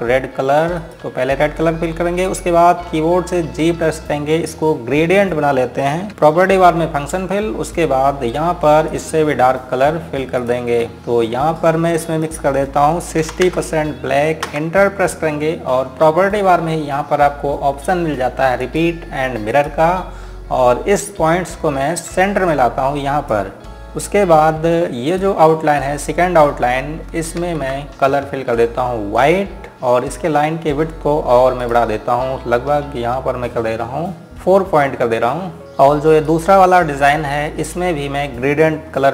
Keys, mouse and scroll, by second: 1.5 click, 4.7-6.4 scroll down 1, 6.4 g, 7.5 click, 14.0 KP_6, 15.2 KP_Enter, 19.3 click, 22.9 click, 24.1 space, 24.4 click, 26.3-27.2 scroll up 1, 27.2 click, 28.2 z, 30.0 right click, 32.4 click, 35.0 click, 35.6-35.9 scroll up 1, 35.9-36.6 scroll down 1, 36.8 click, 37.7-39.1 scroll up 1.